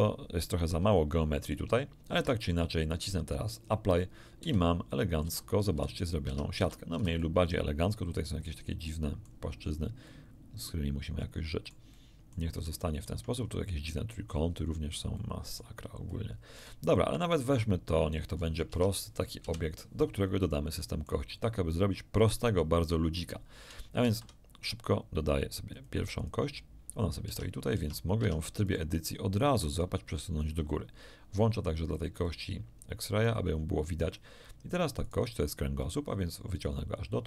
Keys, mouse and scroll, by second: 0.8 shift+click, 2.1 shift+Tab, 3.5 click, 4.4 z, 4.8 click, 5.2 a, 5.7 a, 6.2 Tab, 6.6 a, 7.2 middle click, 8.3-8.6 scroll up 1, 8.8 middle click, 10.0-11.8 middle drag, 12.4 scroll down 1, 12.8 shift+middle click, 13.9 shift+middle click, 16.0 middle click, 18.3-19.4 scroll down 1, 18.6 Tab, 19.4 KP_1, 20.4 shift+click, 24.0 shift+a, 25.7 click, 26.2 click, 27.2 Tab, 27.7 Tab, 28.2 Tab, 28.6 right click, 29.3-30.6 drag, 32.2 click, 33.2 click, 35.0 right click, 35.8-37.2 drag.